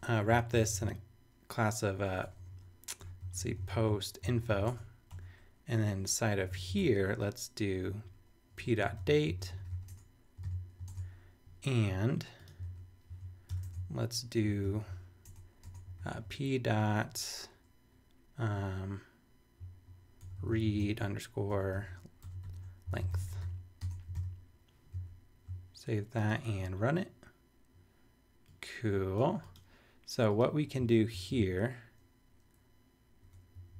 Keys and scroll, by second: 0.0-5.0 typing, 5.1 Return, 6.4 Up, 6.6 super+Right, 6.8 super+Return, 7.7 Return, 8.6-10.2 typing, 10.4 super+Tab, 10.4 super+v, 10.9 super+Tab, 12.6 super+a, 13.1 super+c, 13.5 super+Return, 13.6 super+Tab, 14.6 super+Return, 15.2 super+Tab, 15.8 p, 16.1 ., 19.6-23.9 typing, 24.1 super+v, 24.9 super+s, 31.1 shift+super+Left, 33.2 BackSpace, 33.5 Down.